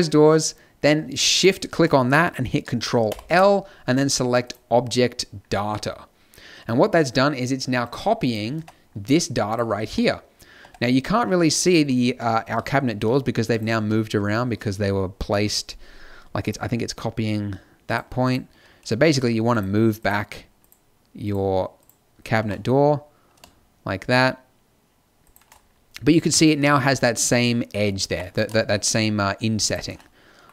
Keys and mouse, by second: 3.1 ctrl+l, 8.6 Tab, 9.9 z, 10.6 Tab, 12.1 z, 12.5 z, 12.9 z, 13.8 z, 18.9 z, 22.3-23.8 drag, 22.3 g, 26.7-28.0 middle drag, 28.0 g, 28.2 click.